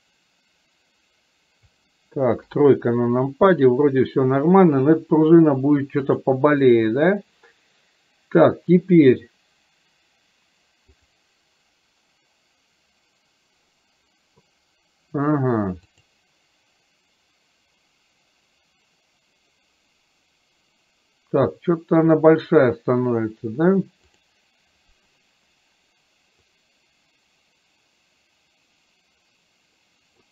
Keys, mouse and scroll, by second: 6.2 click, 11.0 click, 16.1-23.5 drag, 24.2 click, 26.6-30.2 drag.